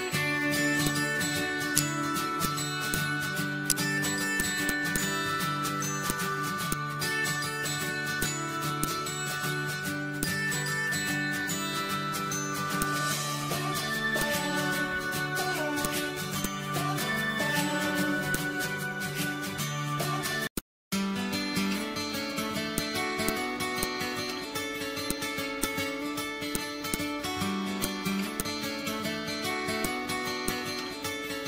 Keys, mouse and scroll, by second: 1.8 shift+right click, 2.5 click, 2.9 click, 3.6 shift+right click, 4.3 click, 4.8 z, 4.9-12.8 drag, 12.8-14.1 drag, 14.2-18.3 drag, 18.3-20.6 drag, 20.6-24.4 drag, 24.4 ctrl+z, 25.1-29.3 drag, 29.3-29.8 scroll down 1, 29.8 click, 30.3 z, 30.5-31.4 drag.